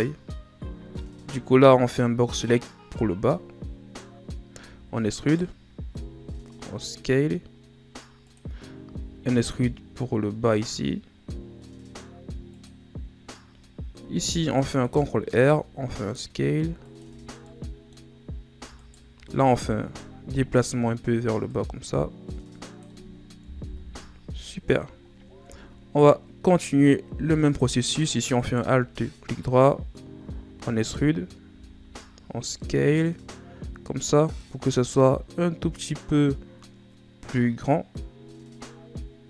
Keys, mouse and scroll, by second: 0.6 z, 1.4 shift+scroll up 3, 4.5 e, 14.0 ctrl+r, 15.3 s, 17.2 scroll down 2, 17.4 middle click, 18.0-18.7 scroll up 3, 18.7 alt+right click, 21.5-23.6 drag, 23.6 KP_1, 24.2 Tab, 24.7 scroll down 4, 25.4 Tab, 28.3 alt+right click, 30.1 e, 31.4 s.